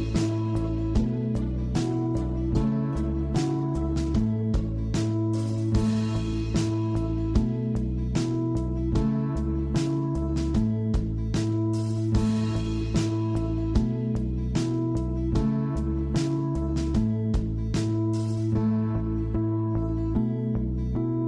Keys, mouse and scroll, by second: 0.1 click, 0.3 click, 0.4 scroll up 1, 0.6 shift+middle click, 1.6 click, 11.0-15.1 drag, 15.1-15.6 scroll down 4, 15.6-16.7 middle drag, 16.7-17.4 scroll down 3, 16.9 shift+middle drag, 17.4 middle click, 17.8-18.3 scroll down 8, 18.3 shift+middle click, 18.6-19.2 scroll up 4, 18.9 shift+middle drag, 19.2 scroll down 1, 19.4-19.9 middle drag, 19.9-20.3 scroll up 4, 20.3-21.2 shift+middle drag.